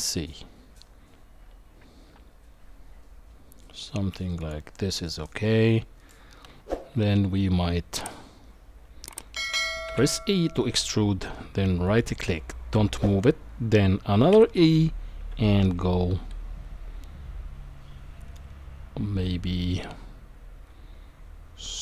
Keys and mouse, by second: 5.1 middle click, 9.9 e, 14.3 e.